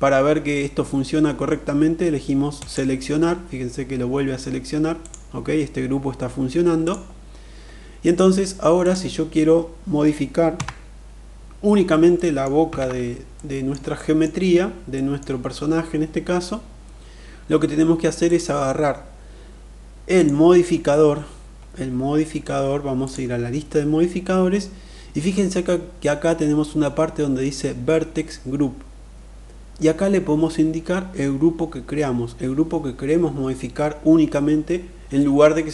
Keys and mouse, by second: 2.0 click, 6.3 click, 7.5 click, 10.0 Tab, 11.7 middle click, 12.2 alt+z, 12.9 middle click, 13.5 shift+middle drag, 14.5 middle click, 17.6 click, 19.6 click.